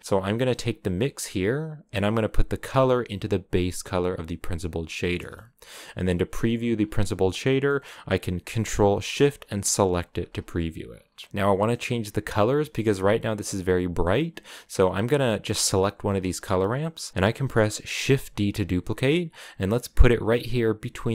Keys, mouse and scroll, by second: 0.0 click, 6.5 scroll down 4, 7.3 scroll down 1, 7.4-9.6 middle drag, 9.6 ctrl+shift+click, 10.2-11.3 scroll down 10, 11.3 middle click, 11.9-14.1 scroll up 4, 14.1-15.4 middle drag, 15.4-17.8 drag, 17.8 shift+d.